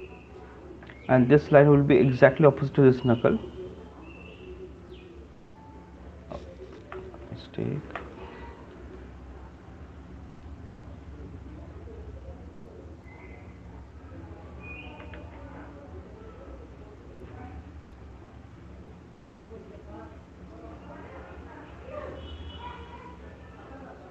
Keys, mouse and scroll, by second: 0.4 click, 1.2-1.5 alt+click, 1.7 click, 3.3 click, 4.4 click, 6.1 click, 6.9 ctrl+z, 8.5 right click, 8.8 click, 10.9 click, 14.8 click, 15.3 ctrl+z, 17.1 click, 18.9 click, 21.7 click, 22.1 click, 23.5 click.